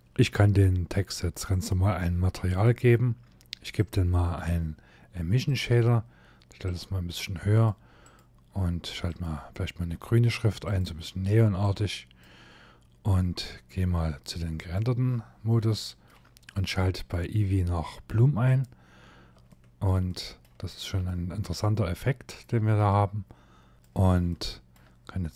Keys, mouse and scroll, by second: 1.1 click, 2.1 click, 14.3 click, 15.4 middle click, 16.6 click, 18.1 click, 18.7 scroll down 3, 19.1 shift+middle click, 19.8 shift+middle click, 20.4 scroll up 2, 20.7 shift+middle click, 23.7 click, 23.9 shift+middle click.